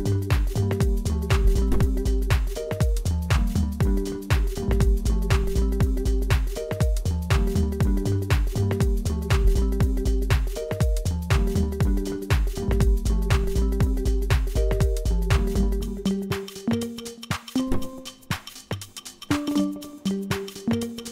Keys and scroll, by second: 1.4-1.8 typing, 6.2-6.6 typing, 7.7 Escape, 8.3 c, 10.2 Escape, 17.4 typing, 17.5 Return.